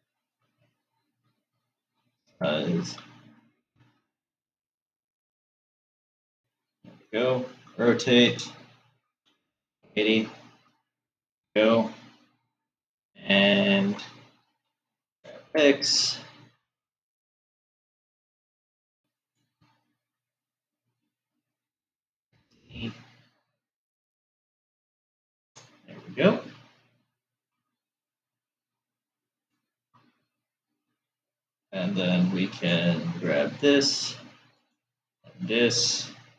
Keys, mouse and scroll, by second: 2.3 s, 8.3 r, 12.2-15.2 middle drag, 15.2 g, 21.6 g, 26.3-28.0 scroll down 5, 28.0-31.4 shift+middle drag, 33.0 shift+click, 35.3 shift+click.